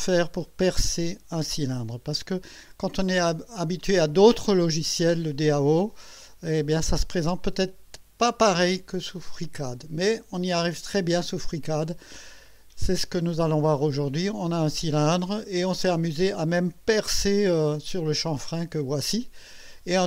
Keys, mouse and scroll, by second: 13.5-15.3 drag, 15.8 click, 18.1-20.0 drag.